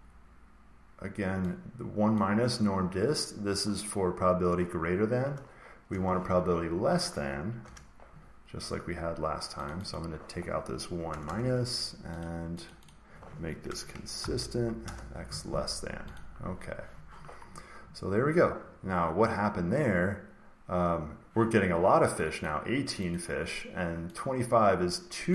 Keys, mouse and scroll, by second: 2.1 click, 5.8 BackSpace, 7.5 Return, 8.8 Return, 9.6 click, 9.8 click, 11.0 BackSpace, 11.2 BackSpace, 12.1 click, 12.6 click, 12.8 click, 13.6-14.1 typing, 14.7 Return, 16.1 click, 17.3-21.1 scroll, 22.4 click, 23.0 click, 24.1 click.